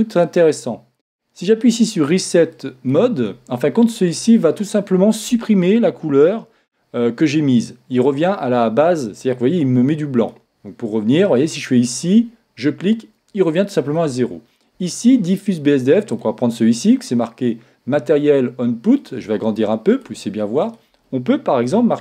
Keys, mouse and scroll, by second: 2.5-4.3 drag, 10.2-11.9 drag, 14.4 click, 16.1-17.9 drag, 19.0-22.0 drag.